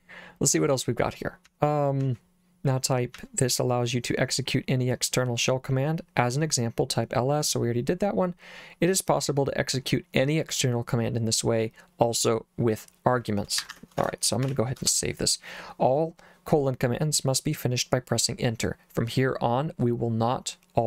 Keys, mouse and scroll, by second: 1.5 j, 2.0 j, 3.2 j, 13.6 Escape, 14.0 shift+;, 14.5 w, 14.8 Return.